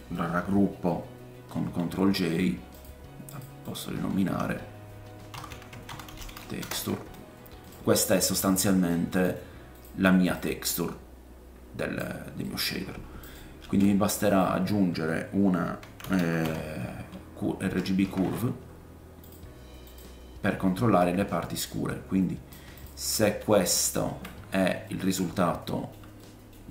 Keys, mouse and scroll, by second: 1.5 ctrl+j, 2.8-12.1 drag, 3.3 middle click, 3.3 right click, 3.6 middle click, 3.6 right click, 3.9 F2, 7.6 middle click, 7.6 right click, 8.3-9.1 scroll down 2, 9.1 middle click, 10.3 middle click, 10.3 right click, 10.6-12.1 middle drag, 10.6-12.1 right drag, 12.8-13.2 scroll up 2, 13.2 click, 13.4-14.6 shift+middle drag, 13.4 click, 13.6 shift+a, 19.9-21.6 drag, 22.8-26.7 drag, 24.8 middle click, 25.4 shift+middle click, 26.2 middle click.